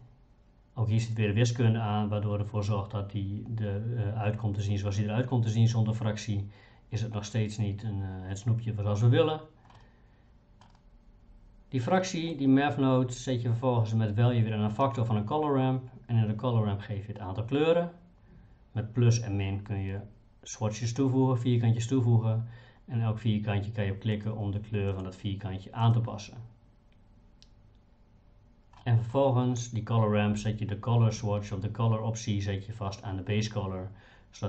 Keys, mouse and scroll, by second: 9.8 middle click, 12.0 middle click, 24.1 click, 24.9 click, 25.8 click, 28.8 middle click.